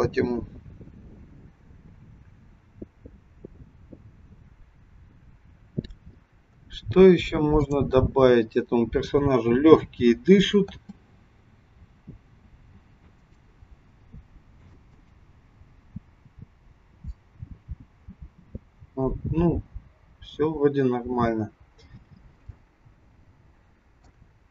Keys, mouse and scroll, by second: 6.5 scroll down 3, 7.7 click, 9.1 click, 10.7 space, 12.7 a, 18.3 space, 20.0-20.5 scroll up 1, 20.5-21.0 scroll up 1, 22.4 shift+middle click.